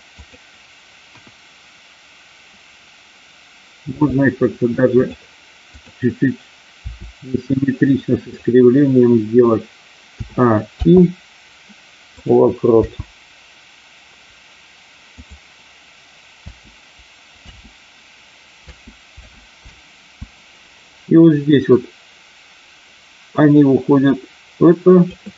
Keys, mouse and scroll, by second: 0.1 click, 1.0 KP_1, 3.8 r, 5.6 click, 8.2 click, 8.2 r, 10.1 a, 10.6 i, 12.7 space, 15.1 click, 16.4 space, 17.4 space, 19.1 space, 21.6-25.1 drag, 21.6 space.